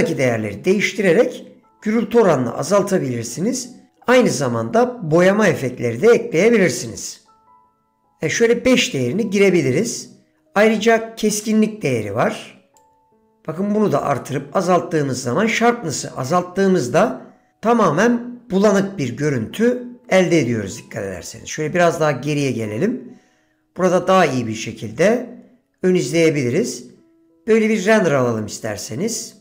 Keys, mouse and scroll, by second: 7.1-8.2 drag, 12.9-17.1 drag, 28.9 click.